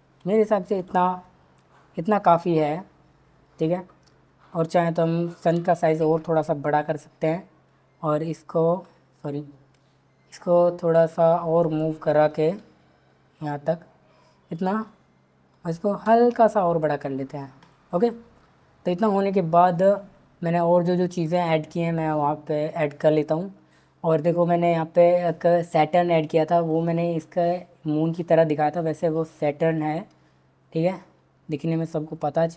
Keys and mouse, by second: 4.6 click, 5.5 s, 6.6 click, 7.6 drag, 7.9 click, 8.8 drag, 12.5 g, 14.5 click, 16.0 s, 17.6 click, 23.0 click, 26.7 click.